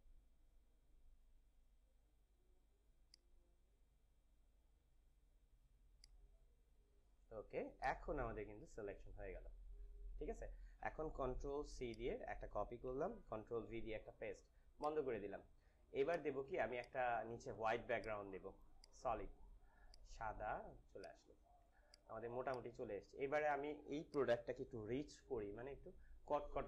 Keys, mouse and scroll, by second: 8.8 ctrl+-, 11.9 click, 12.9 ctrl+c, 13.6 v, 14.7 click, 21.7 space, 22.0 click, 22.2 space, 22.5 click, 22.6 space, 24.1 click.